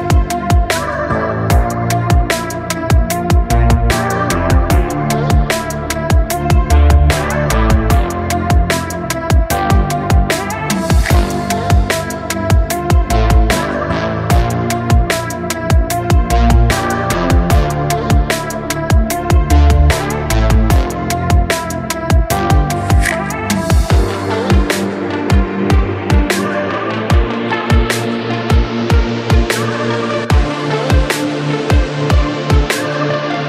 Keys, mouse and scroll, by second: 2.0 click, 6.8 click, 12.5-32.7 drag.